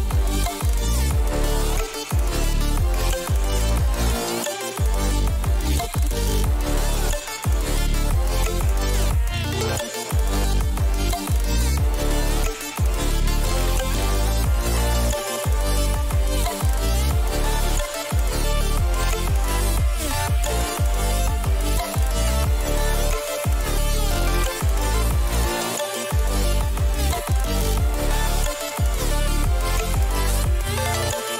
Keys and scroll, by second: 2.8 ctrl+=, 5.9 ctrl+t, 10.0 ctrl+-, 10.8 ctrl+shift+n, 11.5 Return, 13.8 b, 25.2 ctrl+t.